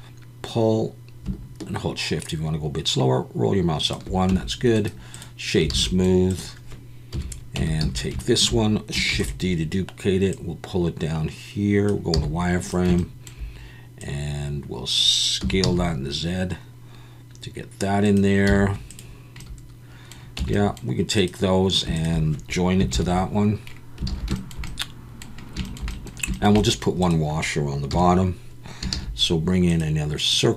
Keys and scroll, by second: 4.3 Tab, 5.7 alt+a, 7.1 KP_1, 7.6 Tab, 7.8 a, 9.1 shift+d, 12.1 z, 15.4 s, 15.6 z, 18.5 z, 20.4 Tab, 22.9 ctrl+j, 24.1 alt+a, 27.9 KP_1, 28.9 shift+a.